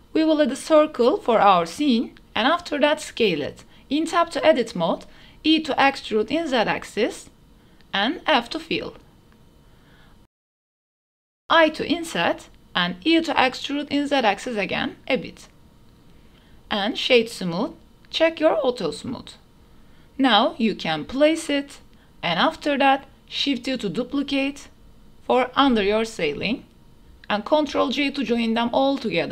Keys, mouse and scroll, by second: 1.3-1.7 drag, 2.1-2.4 shift+drag, 2.5 s, 3.3 click, 4.2 Tab, 4.2 1, 4.2 KP_Decimal, 5.0 shift+middle click, 5.9 e, 6.7 z, 10.1 f, 11.2 i, 12.8 e, 15.5 click, 16.3 Tab, 16.3-17.1 drag, 18.0 click, 18.9-19.7 drag, 20.4 ctrl+KP_7, 21.8 shift+drag, 22.5 shift+d, 23.9 y, 25.5 shift+click, 25.9 shift+click, 26.3 ctrl+j, 26.9 shift+d, 27.1 x, 29.0-29.3 middle drag.